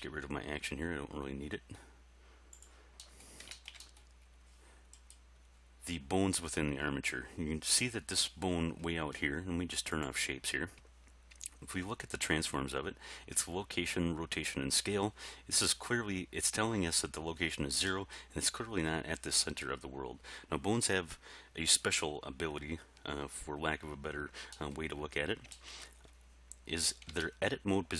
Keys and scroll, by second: 27.1 Tab.